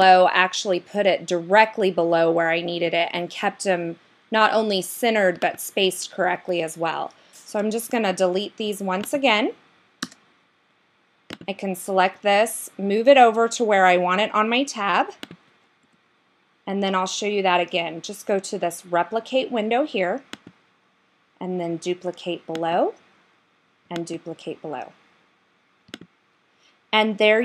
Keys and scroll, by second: 12.2 Right, 15.9 Left.